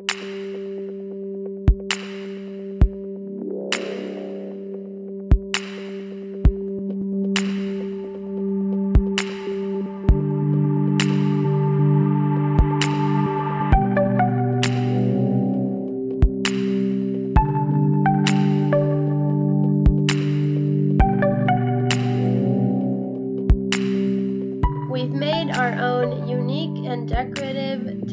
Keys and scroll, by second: 6.9 space, 7.1 space, 10.4 space, 14.9 space, 17.1 a, 18.7 a, 21.0 space, 23.3 space, 23.7 ctrl+s, 24.5 space.